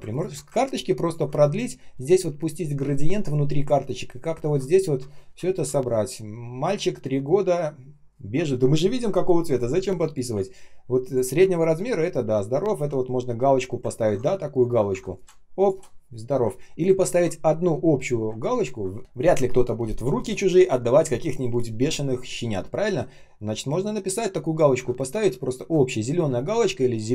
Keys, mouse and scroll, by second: 0.0 ctrl+click, 0.5 ctrl+click, 5.0-5.8 ctrl+scroll up 1, 5.8 ctrl+scroll down 1, 6.3 ctrl+scroll up 1, 7.9 ctrl+scroll down 1, 10.9 ctrl+click, 13.8-14.8 ctrl+scroll up 1, 14.8 щ, 16.4 ctrl+scroll down 1, 18.3 ctrl+scroll up 1.